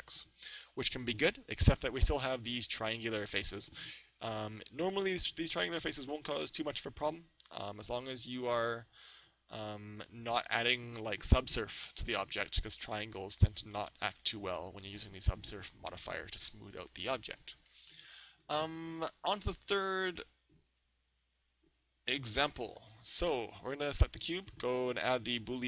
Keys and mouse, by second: 0.6-2.3 middle drag, 4.5-6.2 middle drag, 13.8-16.0 middle drag, 17.9-19.9 middle drag, 19.3 right click, 20.2-22.0 middle drag, 25.0-25.6 drag.